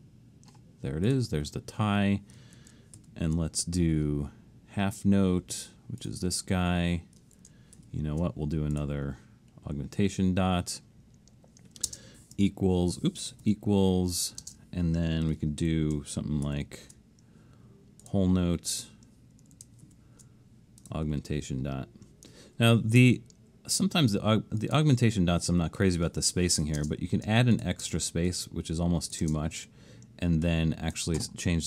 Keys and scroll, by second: 3.0 alt+shift+super+s, 7.8 alt+shift+super+s, 11.9 space, 12.4 BackSpace, 13.5-15.4 typing, 16.5 alt+shift+super+s, 19.9 alt+shift+super+s, 26.8 space.